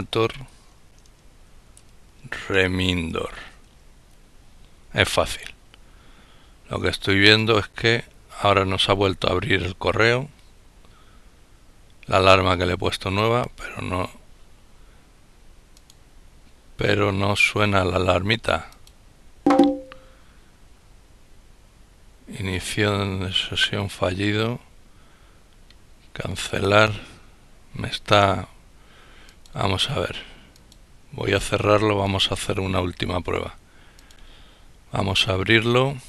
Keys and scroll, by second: 0.0-3.1 typing.